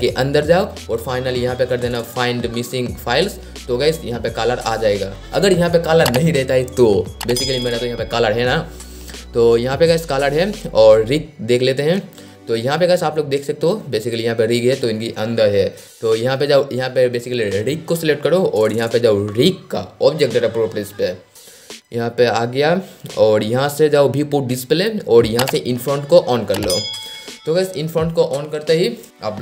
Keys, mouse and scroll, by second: 9.8-10.2 scroll down 1, 10.2 scroll up 1, 11.8 click, 17.2-17.6 scroll down 1, 19.5 scroll down 1, 21.9 click, 23.6-24.3 scroll down 1, 24.3 click, 24.9 scroll down 1, 26.4 click, 27.5 scroll up 1.